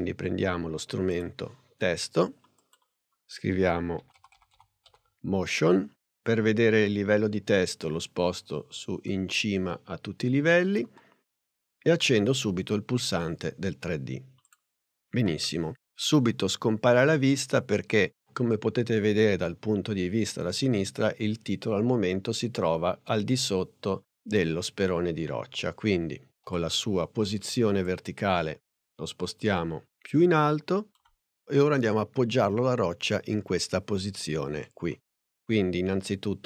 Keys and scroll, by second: 3.3-5.4 typing, 26.5 p.